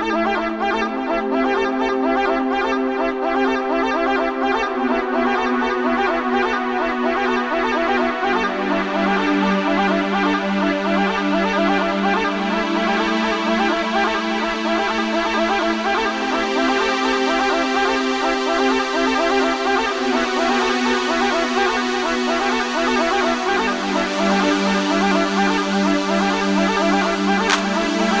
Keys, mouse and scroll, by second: 6.9-28.2 drag.